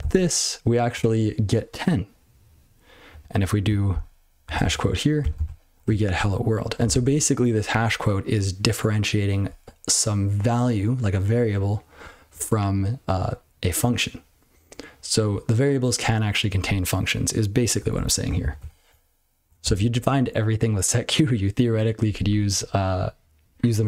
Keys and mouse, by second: 0.0 ctrl+c, 3.1 click, 3.2 click, 4.4 #, 4.6 ', 5.3 ctrl+c, 17.8 BackSpace, 17.9 BackSpace, 18.6 ctrl+c.